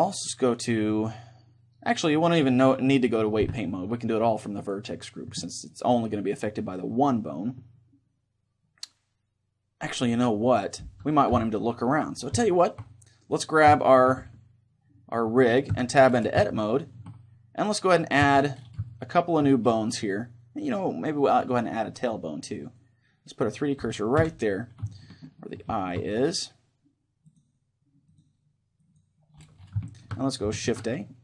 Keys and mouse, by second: 0.3-2.8 drag, 4.6-11.3 drag, 11.3 KP_3, 12.5-15.8 middle drag, 13.4-15.4 right drag, 15.8 Tab, 16.5-18.4 middle drag, 18.2 z, 18.9-21.0 middle drag, 20.7-25.0 drag, 24.2 KP_1, 25.0-27.8 middle drag, 27.3-30.7 drag, 29.9-31.2 middle drag, 30.7 shift+a.